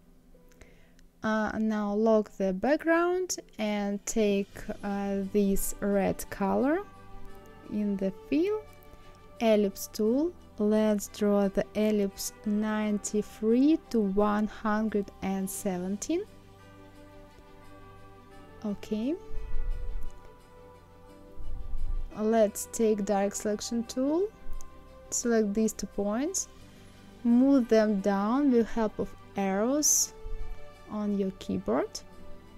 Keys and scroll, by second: 12.4 KP_9, 12.8 KP_3, 15.9 KP_1, 16.4 KP_7, 27.0 Down, 27.5 Down, 28.9 Up, 29.3 Down, 30.9 Down.